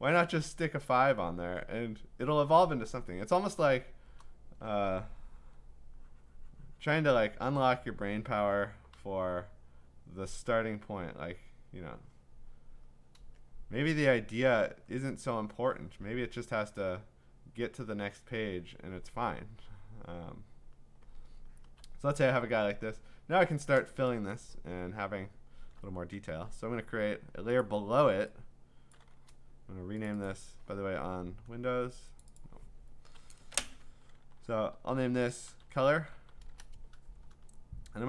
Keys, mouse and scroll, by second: 0.0 click, 0.1 click, 1.1 click, 2.4 click, 3.1 click, 3.2 click, 3.3-4.2 click, 3.5 click, 5.4 e, 7.5 click, 8.9 b, 10.5 click, 11.3 click, 12.2 click, 12.9 click, 13.9 click, 14.9 click, 15.5 click, 16.4 click, 18.4 click, 18.6 click, 19.5-21.4 click, 20.7 click, 21.4 click, 21.6 click, 21.8 click, 25.1-26.0 scroll, 27.6 click, 28.9 click, 30.1 click, 30.3 click, 30.9 Escape, 31.4 F2, 32.2 click, 32.4 click, 35.3-38.0 typing, 37.5-38.0 scroll.